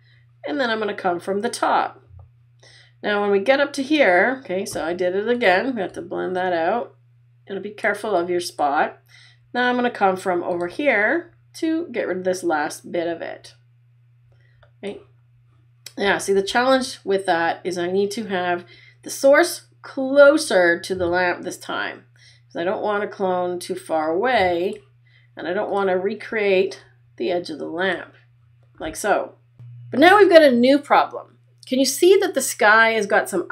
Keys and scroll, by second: 16.4 super+z.